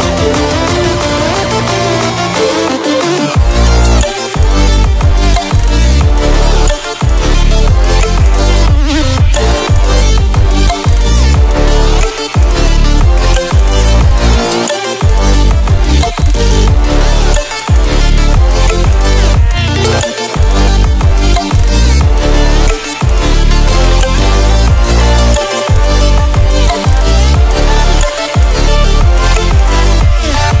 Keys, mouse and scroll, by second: 1.1-20.6 drag, 20.6 Delete, 21.6 space, 21.8 click, 22.1 space, 23.1 space, 24.8 click, 27.9 click, 29.6 Caps_Lock.